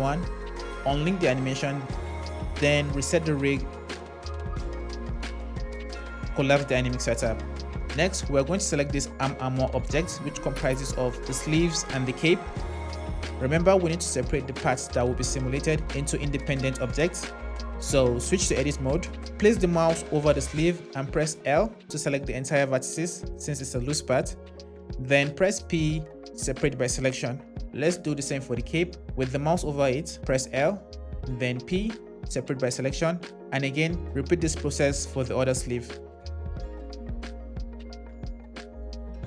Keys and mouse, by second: 0.8 click, 2.9 click, 4.0 click, 6.3 click, 9.2 click, 18.2 Tab, 21.0 l, 25.5 p, 30.5 l, 31.5 p, 33.8 l, 34.8 p.